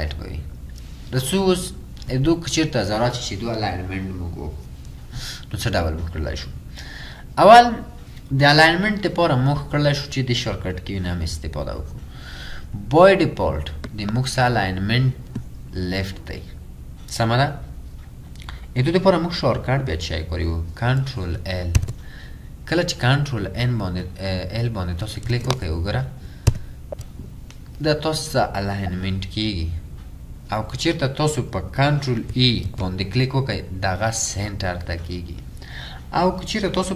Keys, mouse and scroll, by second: 26.5 ctrl+l, 32.7 ctrl+e.